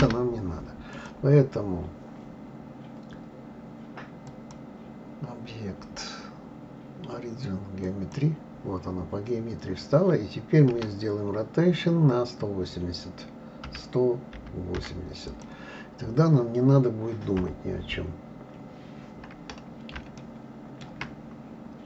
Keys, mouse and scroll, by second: 0.9 click, 4.3-7.3 drag, 17.4 KP_3, 19.2-19.8 scroll up 1, 20.2-21.1 shift+middle drag, 21.1 scroll up 1.